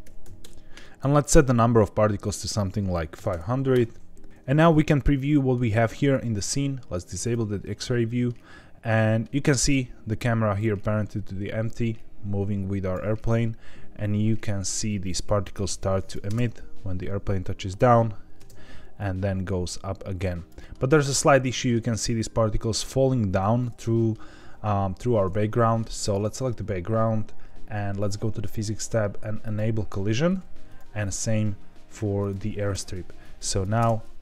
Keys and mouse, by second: 0.8 KP_0, 2.3-4.2 drag, 3.3 KP_0, 4.9-5.5 middle drag, 7.2 click, 8.0 middle click, 9.0 middle drag, 10.5-12.9 drag, 14.3-14.7 middle drag, 15.6-16.1 drag, 16.4 space, 18.3 space, 18.9-20.4 drag, 21.4 middle drag, 23.6-24.1 middle drag, 25.3-25.9 middle drag, 27.9 click, 29.5-30.7 drag, 33.2 click, 33.8 space.